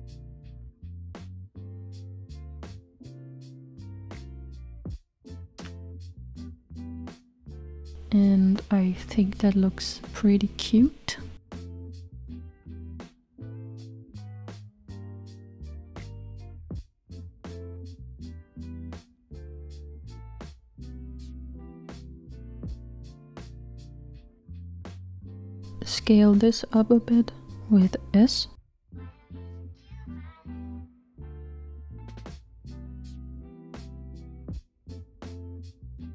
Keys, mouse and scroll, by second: 4.4 Tab, 5.8 click, 6.6-7.4 scroll down 2, 7.4-12.7 middle drag, 12.7-13.6 scroll up 1, 21.9 click, 26.6 s, 31.4 click, 34.5-35.6 middle drag, 35.6 scroll down 1.